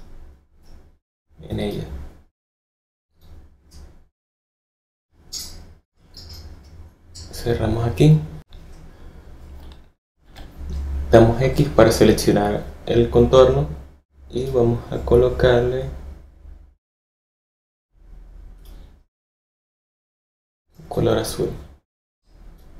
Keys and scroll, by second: 10.2 x.